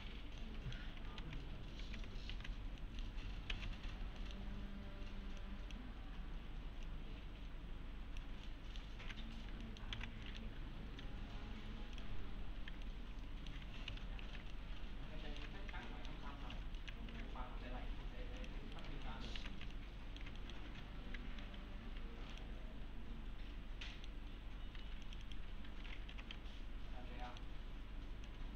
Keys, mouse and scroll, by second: 0.4-1.0 middle click, 1.2 alt+x, 2.3 alt+q, 3.6 alt+x, 3.9-4.2 scroll down 1, 4.2 middle click, 4.5-5.4 scroll down 1, 5.4-6.0 click, 8.5-9.1 alt+middle click, 9.2 1, 9.6 alt+middle click, 9.9 alt+x, 10.3 middle click, 12.0 click, 12.3-12.7 scroll down 1, 12.9-13.8 alt+middle click, 13.9 F4, 14.1-14.4 scroll down 2, 14.5-15.5 alt+middle click, 15.6 scroll up 2, 15.9 alt+middle click, 16.2 scroll up 2, 16.5 F4, 16.8 middle click, 17.1 alt+1, 18.4 click, 18.8 right click, 19.1 alt+middle click, 19.4 alt+q, 19.7-20.4 alt+middle click, 20.8 4, 21.8 1, 22.3 click, 23.9 middle click, 24.8 2, 25.0 click, 25.9-26.9 typing, 26.9-27.2 scroll up 1, 27.2 middle click, 27.6-28.1 scroll up 1, 28.3-28.5 click.